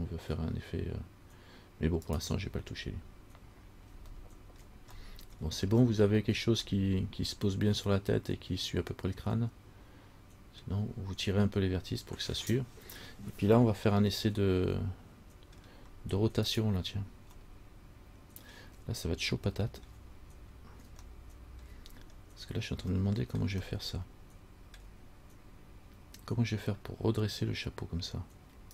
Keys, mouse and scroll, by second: 3.0 scroll down 2, 4.4 shift+middle click, 4.8 shift+scroll down 1, 5.3 middle click, 5.3 scroll up 1, 5.6 scroll down 1, 6.1 shift+scroll up 1, 6.6 shift+scroll down 1, 6.9 middle click, 6.9 scroll up 1, 10.9 scroll down 1, 14.5 middle click, 16.7 right click, 17.6 middle click, 19.5 shift+scroll up 1, 19.6 shift+middle click, 20.1-21.1 shift+scroll down 1, 21.3 shift+middle click, 23.2 shift+middle click, 23.8 shift+scroll down 1, 23.9 middle click.